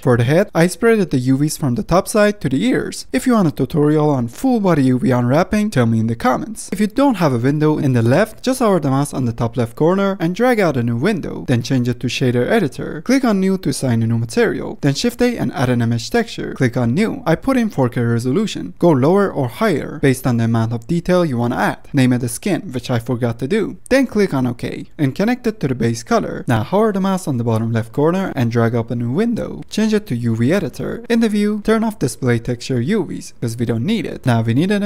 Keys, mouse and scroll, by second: 0.3 ctrl+shift+click, 0.9 u, 1.2 middle click, 2.1 u, 2.5 middle click, 3.0 scroll down 1, 6.6 click, 7.1-7.7 middle drag, 7.7-10.1 scroll up 1, 10.1-12.9 drag, 12.9 n, 13.6-14.3 drag.